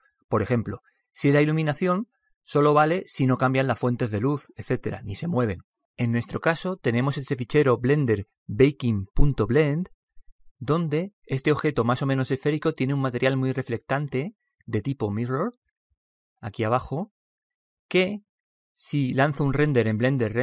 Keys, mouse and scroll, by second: 13.6 click.